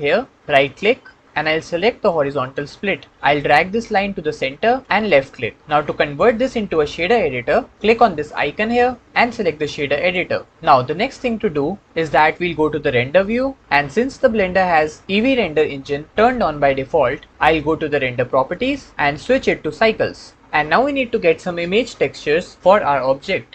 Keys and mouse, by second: 0.5 click, 1.2-5.0 drag, 8.5-10.1 drag, 18.4 click, 19.3-20.4 drag, 20.4-23.4 middle drag.